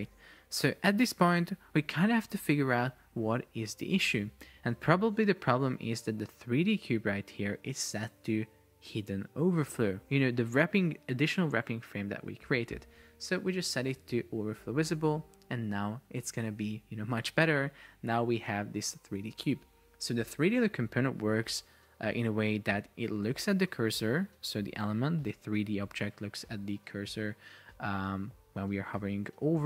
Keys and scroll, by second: 29.1 Escape.